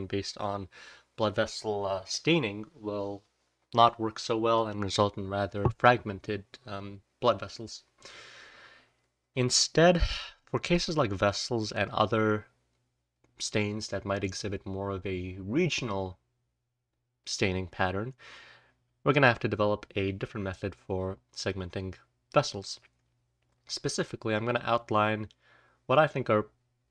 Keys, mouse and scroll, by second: 5.0-7.0 scroll down 1, 7.0-7.6 scroll down 1, 7.6-8.2 scroll down 1, 8.2-17.2 scroll down 1, 9.9-10.6 drag, 11.8-17.2 drag, 23.5-26.9 scroll down 1, 23.8 click.